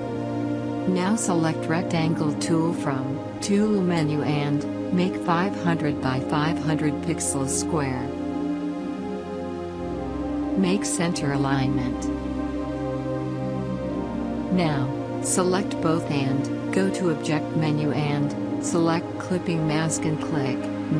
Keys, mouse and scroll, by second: 0.8 right click, 1.5 click, 3.9 right click, 4.7 click, 8.7 click, 17.6 click.